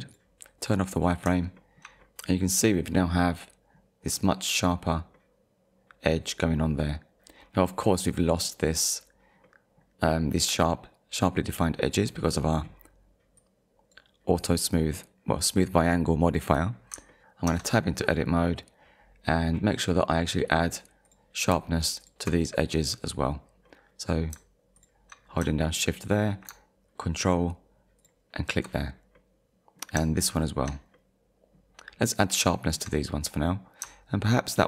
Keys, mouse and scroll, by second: 1.0 click, 1.6 shift+middle click, 5.1 middle click, 9.4 middle click, 13.4 click, 16.9 click, 17.5 Tab, 18.1 click, 18.7-19.0 scroll up 1, 20.1 click, 21.1 click, 22.0 ctrl+click, 22.7 middle click, 23.7 middle click, 24.8 shift+click, 25.2-25.7 scroll down 2, 25.7 shift+middle click, 28.0 ctrl+click, 29.2 middle click, 30.4 shift+click, 30.9 middle click, 32.5 shift+middle click.